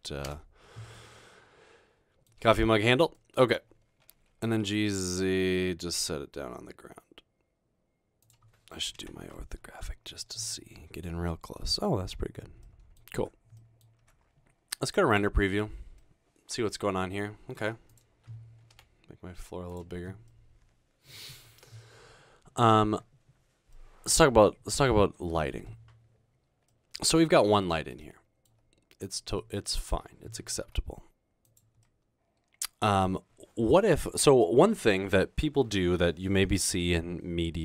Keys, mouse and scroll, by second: 0.5 Tab, 1.0-2.3 middle drag, 2.6 scroll down 2, 4.2-5.1 typing, 8.3 click, 9.2 1, 10.5 scroll down 1, 12.1-13.9 scroll down 2, 13.3 Tab, 14.0 Tab, 16.0-17.6 middle drag, 19.0 s, 20.3 click, 24.2 middle click, 26.8 middle click, 27.7 middle click, 30.7 g, 31.9-33.0 middle drag.